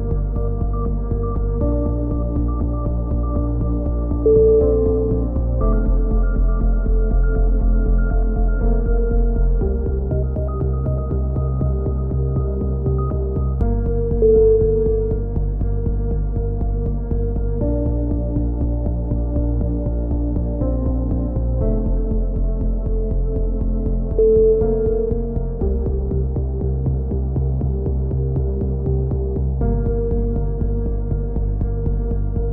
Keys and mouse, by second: 0.2-1.3 drag, 1.6 click, 2.2 click, 2.9-4.7 drag, 3.3 a, 6.5 KP_7, 7.1 click, 7.6 z, 8.7 z, 9.1 z, 9.7-10.7 drag, 15.0 z, 16.8 z, 17.1 z, 17.4-18.5 drag, 18.6 click, 22.9-23.9 drag, 26.1 Tab, 26.2-27.3 middle drag, 28.3 Tab, 29.1-30.4 right drag, 30.4 middle click, 31.1-32.2 drag, 32.4-32.5 right drag.